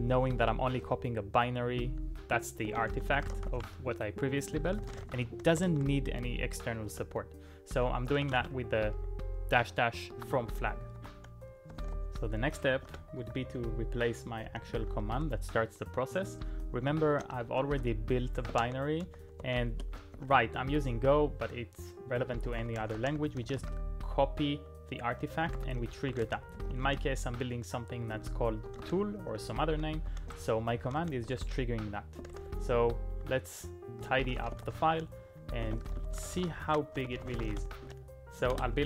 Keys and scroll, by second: 0.0-0.8 typing, 2.4-8.7 typing, 10.1-20.8 typing, 22.1-24.1 typing, 25.2-32.5 typing, 34.0-37.9 typing, 38.5 Return.